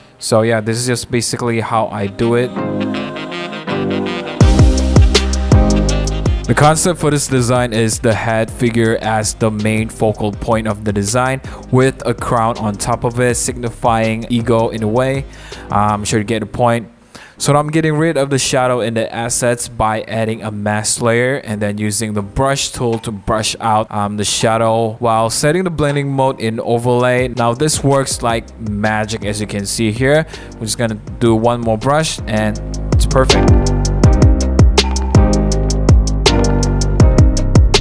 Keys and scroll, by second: 1.4-2.2 typing, 5.5 v, 8.9 super+a, 9.2 super+c, 9.5 super+d, 10.8 super+v, 14.5 super+a, 14.8 super+c, 15.0 super+d, 15.8 super+v, 23.7 super+1, 24.5 b, 30.2 super+z, 33.7-35.0 typing, 35.3 super+t, 35.6 Return, 35.7 super+d, 37.3 super+g, 37.3 super+a, 37.5 super+d, 37.6 super+a, 37.7 super+d.